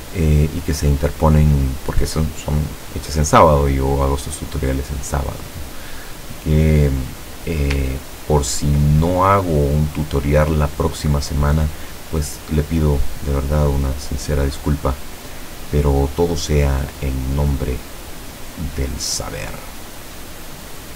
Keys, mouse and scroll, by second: 8.0-8.4 ctrl+scroll up 2, 9.2 ctrl+click, 10.0 click, 13.6-16.5 drag, 17.3-19.8 drag, 20.5-20.9 drag.